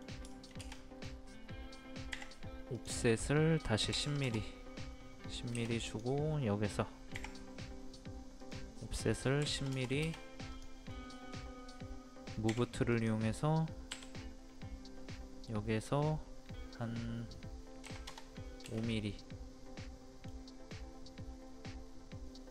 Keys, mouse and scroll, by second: 0.3 shift+middle click, 1.3-2.1 scroll up 1, 2.1 typing, 2.7 click, 3.9 KP_1, 5.9 click, 7.2 o, 8.4 click, 9.4 KP_1, 10.5 click, 10.9-12.0 middle drag, 12.5 m, 12.9 click, 13.9 right click, 17.8 KP_5, 18.9-20.7 middle drag, 20.7-22.5 middle drag.